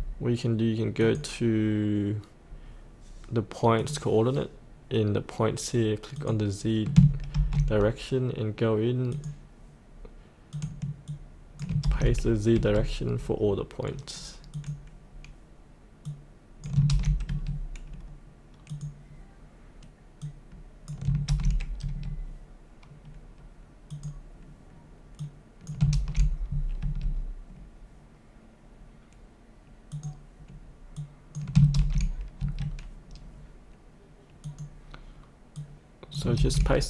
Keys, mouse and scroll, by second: 7.3 ctrl+c, 9.1 click, 11.8 ctrl+v, 12.5 Tab, 14.5 click, 16.9 ctrl+v, 17.3 Tab, 18.7 click, 21.3 ctrl+v, 21.8 Tab, 23.9 click, 25.9 ctrl+v, 26.8 Tab, 29.9 click, 31.7 ctrl+v, 32.4 Tab, 34.4 click, 36.4 ctrl+v.